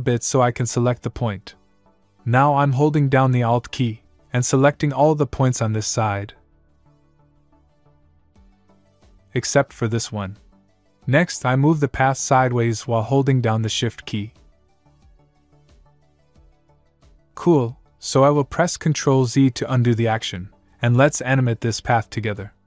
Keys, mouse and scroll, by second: 1.5 click, 5.2 alt+click, 13.8 click, 19.4 ctrl+z.